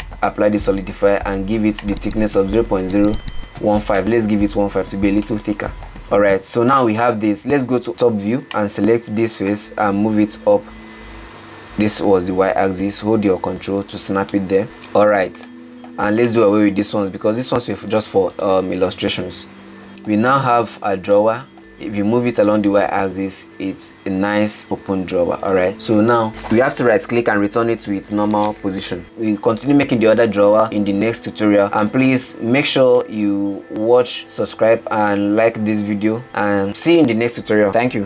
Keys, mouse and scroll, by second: 0.3-1.9 drag, 2.0-5.1 drag, 5.9-7.8 middle drag, 7.8 KP_7, 8.4 Tab, 8.8 click, 10.4 g, 14.1-15.0 middle drag, 15.0 Tab, 15.3 alt+z, 15.7-16.4 middle drag, 16.4 click, 17.5 x, 18.5 click, 18.8 x, 19.9-20.5 middle drag, 20.5 click, 21.4-22.3 middle drag, 22.3 g, 29.0-30.4 middle drag, 33.6-34.4 scroll down 2, 34.4-36.8 middle drag, 37.2 middle click.